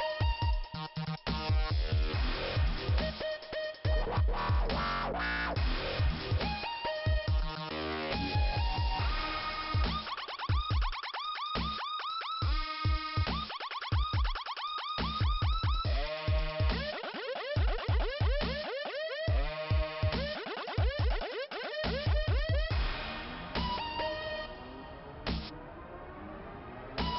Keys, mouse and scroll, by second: 2.2 click, 3.7 click, 4.2 click, 5.2 click, 11.2 scroll up 1, 15.1 click, 16.6 click, 16.8 click, 17.7 i, 18.5 scroll up 2, 20.5 click, 21.5 click, 21.9 click, 22.7 click, 22.9 click.